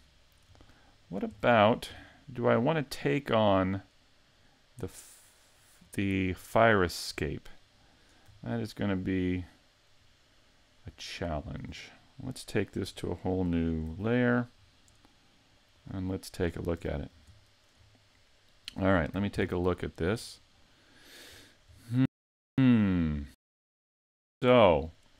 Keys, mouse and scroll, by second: 1.4 middle click, 2.1 shift+middle click, 2.9 right click, 3.5 middle click, 4.9 middle click, 6.6 shift+middle click, 7.9 right click, 9.2 shift+right click, 10.0 right click, 10.9 right click, 11.5 shift+right click, 13.3 m, 15.8 click, 16.5 middle click, 16.8 a, 17.4 shift+middle click.